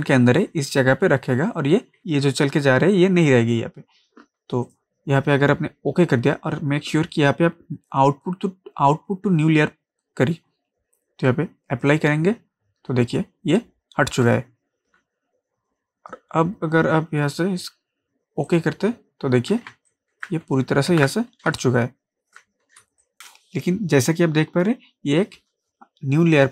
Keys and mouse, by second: 11.8 click, 18.5 click, 19.7 ctrl+space, 19.9 ctrl+click, 20.2 ctrl+space, 20.9 ctrl+d, 21.5 ctrl+space, 21.6 ctrl+click, 22.0 ctrl+space, 22.8 ctrl+space, 23.0 ctrl+click, 23.1 ctrl+space.